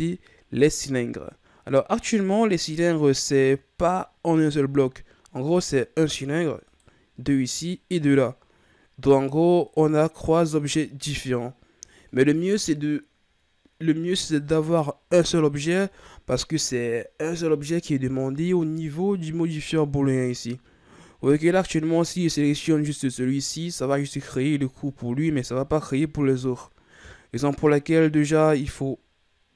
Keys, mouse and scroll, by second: 3.2-4.3 middle drag, 4.3-5.4 scroll up 2, 5.4 right click, 6.6 right click, 7.6 right click, 9.7 right drag, 10.3 right drag, 18.7 right click, 21.6 click, 23.9-27.0 middle drag, 27.5 right click, 28.1 right click.